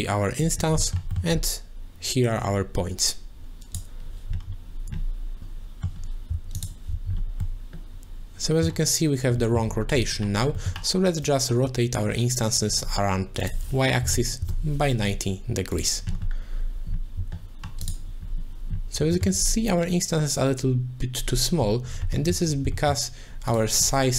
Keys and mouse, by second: 0.9 middle click, 2.3-3.7 drag, 5.4 middle click, 6.6 alt+shift+click, 7.5-8.7 middle drag, 9.6 middle click, 10.7 middle click, 11.2-12.6 drag, 12.7 click, 13.5 click, 19.1 shift+middle click, 22.2 middle click, 22.9 middle click, 23.5 click.